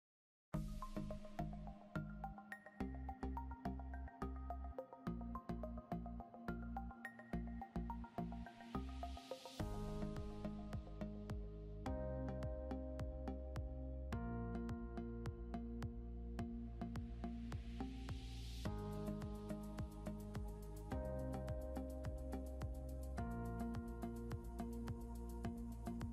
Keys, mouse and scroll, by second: 12.2 F12, 24.1 F12.